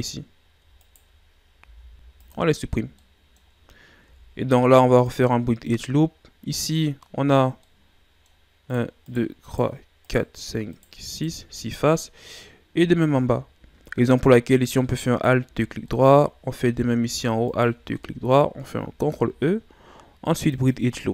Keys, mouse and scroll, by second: 0.3 scroll up 2, 0.8 shift+right click, 1.6 x, 2.7 scroll down 3, 2.9-4.0 middle drag, 4.0 ctrl+Tab, 5.8-6.6 scroll up 2, 6.6-8.7 middle drag, 8.7 right click, 9.0 right click, 9.4 right click, 10.0 right click, 10.7 right click, 11.0 right click, 11.5-13.9 middle drag, 13.9 scroll up 2, 15.0 alt+right click, 15.6 scroll down 2, 15.9-17.4 middle drag, 17.4 alt+shift+right click, 17.9-19.0 middle drag, 19.0 ctrl+e.